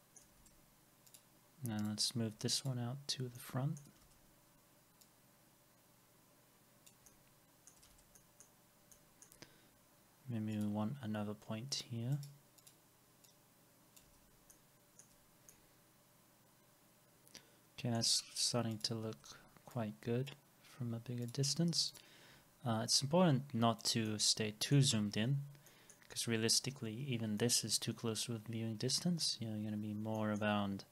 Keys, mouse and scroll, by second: 0.4 alt+x, 2.6 ctrl+click, 3.4 alt+middle click, 4.0 alt+x, 7.9 alt+x, 12.1 right click, 14.1 alt+x, 14.5 alt+middle click, 15.2 scroll down 1, 15.9 alt+middle click, 19.1 alt+x, 20.7 scroll up 1, 21.9 ctrl+click, 24.1 alt+middle click, 25.0 alt+x, 25.0 middle click, 25.3 scroll down 1, 25.7 middle click, 26.2 alt+middle click, 26.9 scroll up 1, 29.0-29.6 scroll down 1, 30.2 middle click, 30.7 scroll down 1.